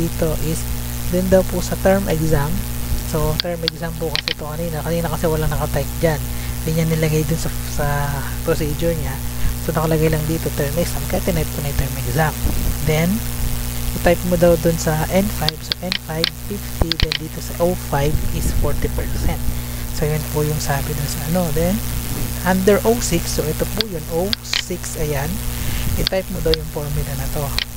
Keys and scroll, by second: 3.2 Tab, 12.6 Tab, 15.3 Tab, 21.1 Tab, 22.9 Tab, 25.5 Tab.